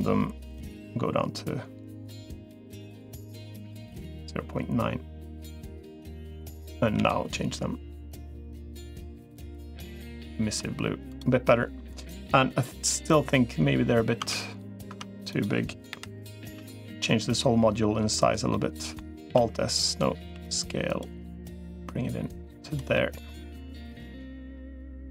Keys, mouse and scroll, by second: 0.4-5.6 drag, 6.8 g, 10.1 middle click, 14.0 Tab, 14.8 Tab, 15.8 l, 16.4 s, 18.3 middle click, 19.2 alt+s, 20.0 s, 21.6-22.6 drag, 22.7 middle click, 24.0-25.0 drag.